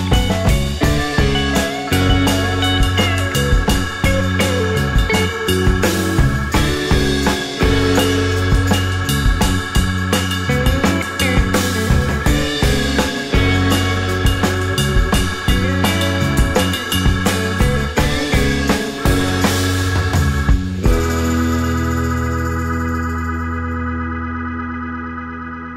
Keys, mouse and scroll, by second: 1.4 right click, 2.3-4.7 scroll up 1, 4.7 Delete, 5.1 scroll, 5.1 scroll up 1, 6.0-7.4 scroll up 1, 8.9 Delete, 9.3 scroll, 9.3 scroll up 1, 9.8-11.2 scroll up 5, 12.1 shift+click, 18.1-18.5 scroll down 1, 21.1 alt+middle click, 21.3 alt+scroll up 1, 21.8 alt+middle click, 22.1-22.4 alt+scroll up 2, 23.2 space, 23.8 scroll up 1, 24.3 alt+middle click, 24.6 alt+click, 25.1-25.6 alt+scroll up 2, 25.2 alt+middle click, 25.6 alt+click.